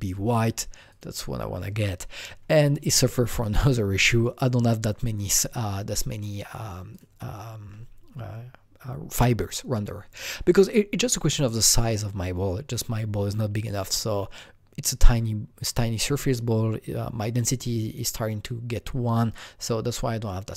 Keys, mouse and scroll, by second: 0.9-3.5 drag, 4.2 click, 6.9 click.